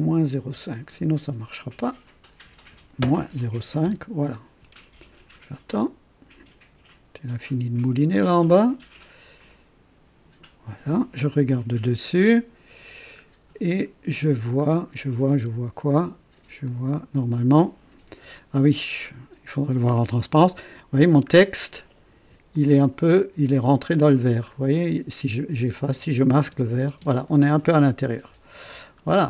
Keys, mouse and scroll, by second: 1.7 click, 2.7 KP_Subtract, 3.8 Return, 4.0 Return, 11.3 KP_2, 12.2 right click, 13.1 scroll up 1, 13.7 right click, 14.7 scroll down 1, 15.3-16.6 drag, 16.6 click, 21.2 scroll up 2, 22.5 click, 22.9 space, 23.5 space, 24.4 scroll up 1, 25.5-26.8 typing, 28.2 KP_1, 28.8-29.2 scroll down 1.